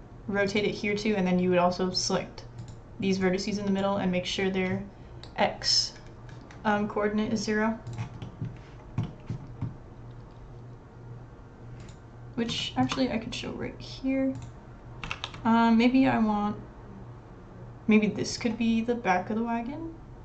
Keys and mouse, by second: 2.6 click, 3.2 click, 3.8-8.2 drag, 8.2-9.3 middle drag, 9.3 click, 12.6 shift+middle click, 15.1 ctrl+r, 15.3 click, 15.4 click.